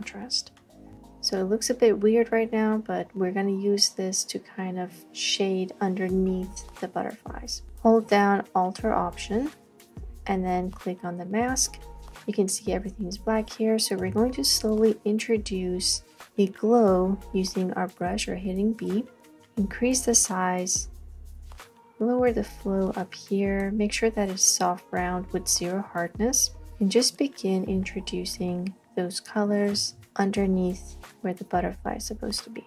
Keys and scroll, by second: 14.1 b, 28.4 space, 28.9 space, 29.0 space.